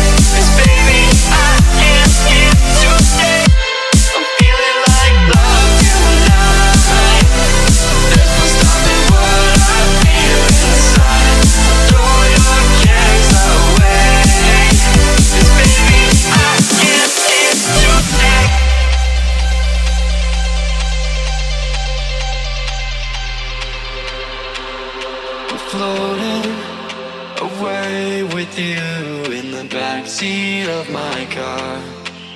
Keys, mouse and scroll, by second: 0.5 click, 2.1-2.5 typing, 2.6 Return, 3.5 click, 7.9-9.4 typing, 10.3 click, 10.8-12.8 typing, 13.7 click, 14.2-15.4 typing, 16.5 click, 16.8-18.3 typing, 18.7-23.3 drag, 24.3-25.4 typing, 26.3 click, 27.3 click, 27.4 F10, 28.4 click.